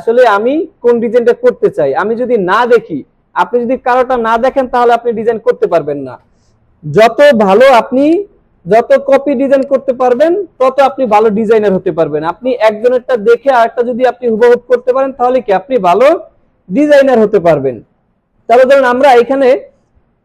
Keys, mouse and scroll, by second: 7.4 alt+space, 7.6 alt+scroll down 1, 8.0 space, 8.1-9.0 click, 8.5 space, 9.1 alt+scroll up 1, 9.5 space, 9.6-10.8 click, 10.0 space, 17.8 click, 18.9 click.